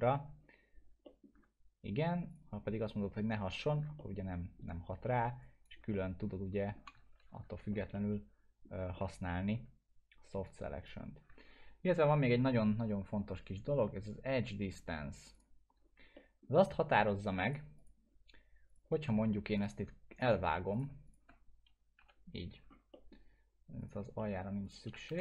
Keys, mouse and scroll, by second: 2.3 click, 4.0-4.6 alt+middle drag, 5.4 click, 5.9 alt+middle click, 5.9-6.8 alt+middle click, 7.2 ctrl+z, 7.9-8.9 alt+middle drag, 10.4-11.1 click, 11.6 ctrl+z, 15.3 ctrl+z, 15.3 click, 16.1 alt+middle click, 17.4 click, 19.1 scroll down 1, 19.5 click, 21.1 shift+click, 22.0 Delete, 22.9 alt+middle click, 23.8 click, 24.2 alt+middle click, 24.6 click, 25.1 Delete.